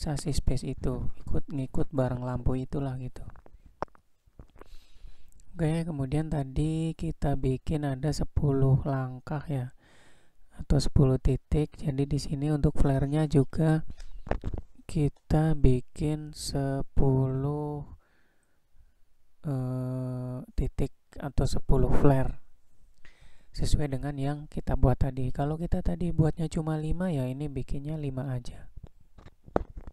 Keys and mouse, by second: 0.5-0.9 shift+middle drag, 2.3 click, 3.1-3.4 shift+middle drag, 4.0-4.4 shift+middle drag, 5.7 shift+middle click, 7.8 shift+d, 10.6 shift+d, 13.2 shift+d, 20.1 shift+d, 22.4 shift+d, 24.4 shift+d, 27.0 shift+d, 29.8 shift+d.